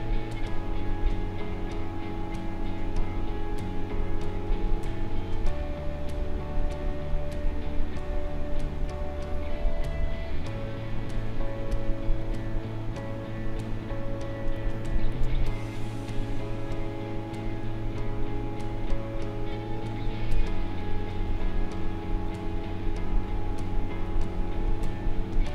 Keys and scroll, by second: 14.5 space.